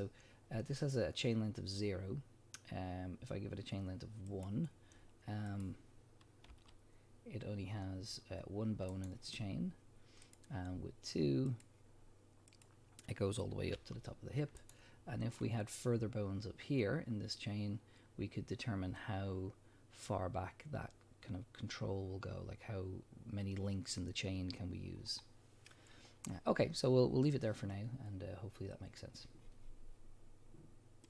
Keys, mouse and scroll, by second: 4.3 click, 5.5 click, 6.5 g, 9.1 right click, 10.2 click, 11.5 click, 12.5 click, 13.7 g, 14.7 right click, 15.2 scroll down 1, 25.2 scroll up 1.